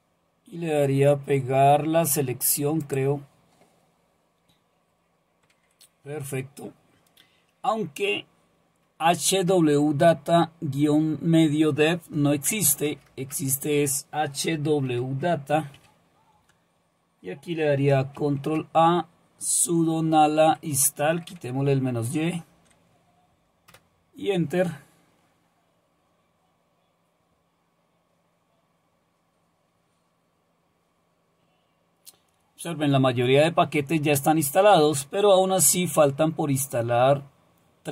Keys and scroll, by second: 5.5 Right, 12.5 BackSpace, 12.7 BackSpace, 12.9 BackSpace, 15.8 a, 18.2 ctrl+a, 19.5-20.2 Right, 21.7 Delete, 21.9 Delete, 22.5 Delete, 23.7 Return.